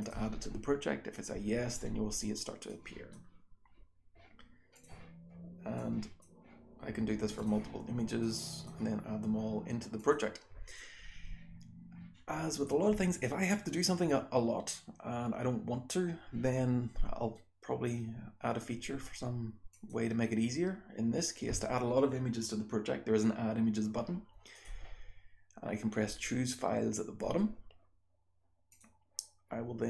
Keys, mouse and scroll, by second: 19.7 click.